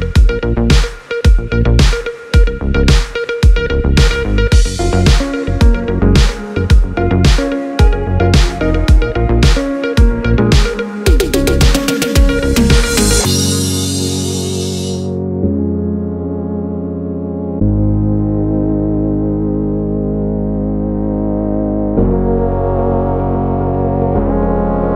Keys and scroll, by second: 4.0 super+d, 8.5-11.0 typing, 16.4 s, 18.9 -, 19.1 Return.